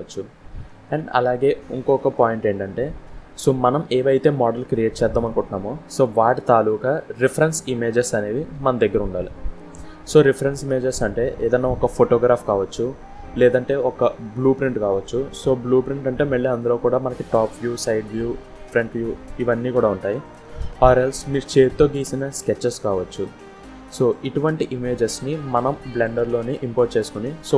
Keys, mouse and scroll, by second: 0.1 scroll up 4, 0.4 scroll down 1, 0.6 middle click, 2.3-2.8 scroll down 1, 2.8 Delete, 3.6 scroll down 1, 3.9 middle click, 5.8 scroll down 1.